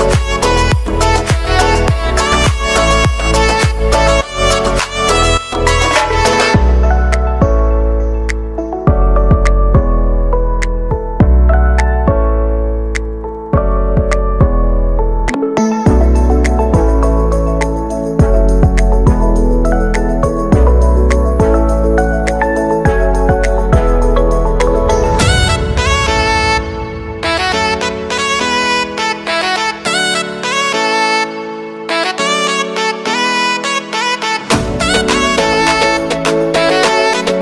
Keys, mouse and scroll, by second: 4.1-6.0 middle drag, 6.2 click, 7.3 click, 7.7-8.2 scroll down 3, 8.2 Tab, 8.6 middle click, 8.9-9.2 scroll up 1, 9.2 Tab, 9.8-10.9 middle drag, 10.9 click, 12.4 g, 14.0 click, 14.7 Tab, 15.2 g, 17.6 click, 18.2-20.3 drag, 20.3 shift+middle click, 20.9-22.8 scroll up 3, 22.8-26.6 drag, 28.2 drag, 28.5 scroll down 4, 28.7 middle click, 29.1 scroll down 1, 29.4-29.8 shift+middle drag, 29.8-30.4 scroll down 1, 30.4-31.9 middle drag, 31.9 scroll down 3, 32.1-32.6 shift+middle drag, 32.6-33.1 scroll up 1, 33.1 click, 36.1-36.6 middle drag, 36.6-37.4 scroll down 3.